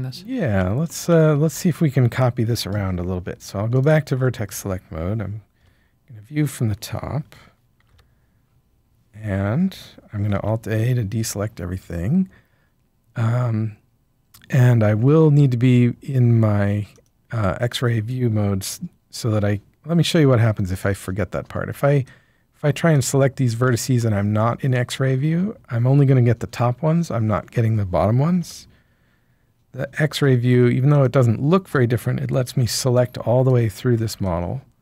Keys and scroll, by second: 1.4 Tab, 5.5 7, 7.7 a, 9.1 typing, 10.3 alt+a, 21.4 b, 28.4 7, 32.6 b, 34.0 b.